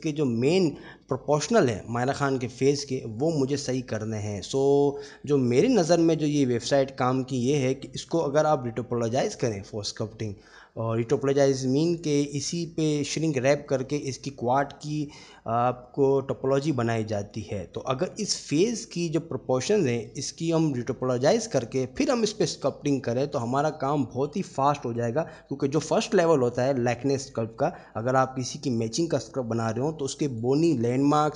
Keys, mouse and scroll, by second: 2.2-5.5 middle drag, 7.8 shift+middle drag, 11.9 middle click, 20.3-20.6 middle drag, 23.6-24.5 middle drag, 28.2-29.0 middle drag, 30.3-30.6 middle drag.